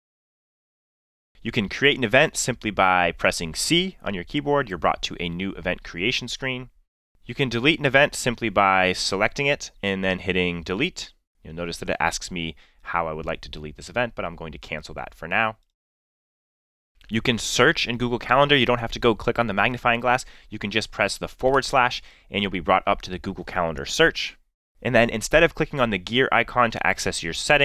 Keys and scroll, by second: 3.6 c, 10.6 space, 21.6 /.